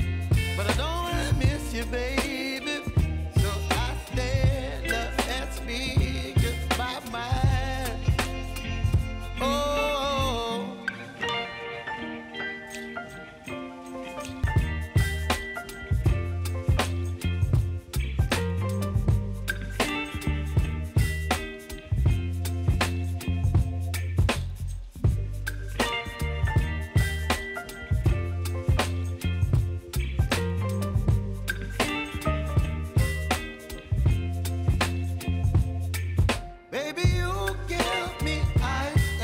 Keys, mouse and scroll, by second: 1.4 click, 2.3 Return, 5.7 click, 9.2 Return, 13.9 Return, 14.1 alt+click, 14.8-17.2 typing, 17.3 scroll up 1, 18.2 click, 20.1 space, 22.1 click, 23.7 space, 25.6 space, 26.6 click, 29.0 space, 30.0 click, 31.9 ctrl+a, 32.2-33.7 typing, 34.5 click, 39.1 [.